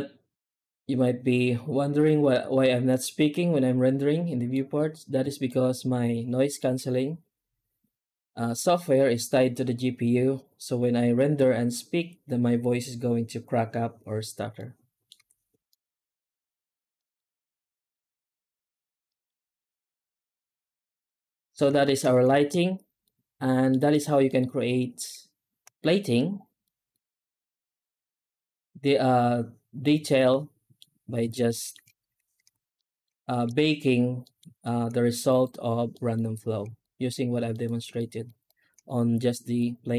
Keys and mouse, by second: 5.3-6.4 shift+middle drag, 14.4-14.9 middle drag, 15.1 z, 16.8 middle drag, 17.6 middle drag, 18.9 middle drag, 20.2 z, 21.3 middle drag, 21.7 middle drag, 22.4 ctrl+s, 23.0 alt+middle click, 23.8 right click, 24.1 middle click, 26.6 middle click, 27.6 middle click, 29.7-30.6 middle drag, 31.3 shift+middle drag, 32.1 alt+h, 32.6 middle drag, 33.2 shift+middle drag, 34.1 middle drag, 34.5 shift+middle drag, 35.1 right click, 35.8 middle drag, 36.7 shift+middle click, 37.3 alt+middle click, 37.8 middle drag, 38.3 shift+middle drag, 39.4 right click.